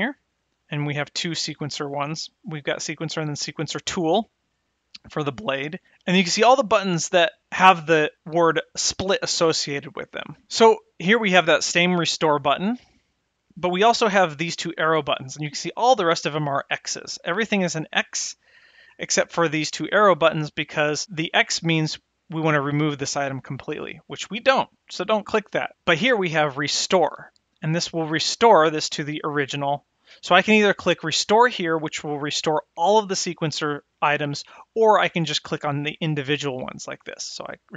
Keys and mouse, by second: 36.7 click.